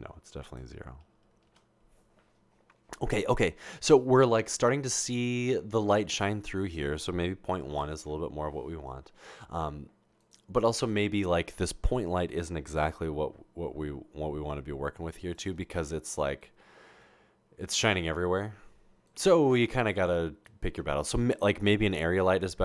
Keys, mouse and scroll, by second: 0.5 click, 3.5 typing, 6.7 click, 7.8-8.4 typing, 13.0 g, 18.1 g.